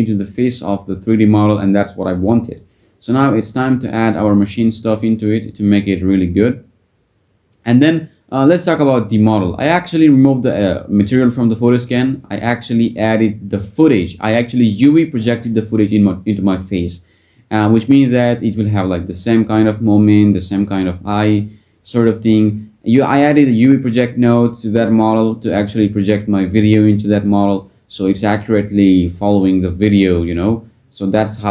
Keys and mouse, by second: 7.2 click, 8.1 click, 14.8 click, 16.1-16.7 drag, 23.5 click, 26.0 click.